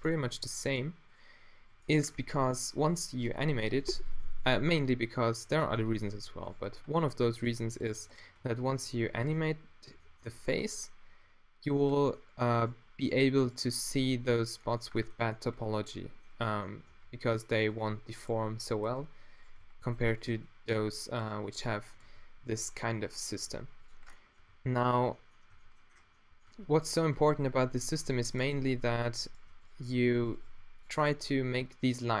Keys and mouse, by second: 0.5 g, 2.2 drag, 2.3-3.5 middle drag, 5.0 e, 6.5-8.2 middle drag, 6.6 g, 8.4 d, 9.0 f, 11.1 e, 14.1 f, 16.8 e, 19.6 f, 22.0 f, 22.4 a, 22.8 g, 23.5 g, 24.2-25.2 middle drag, 24.5 g, 25.5 a, 26.5 Tab, 27.2 Tab, 28.0 ctrl+r, 28.6 g, 29.1-31.2 drag, 29.9 g, 30.6 g, 31.2-32.2 middle drag, 31.2 a.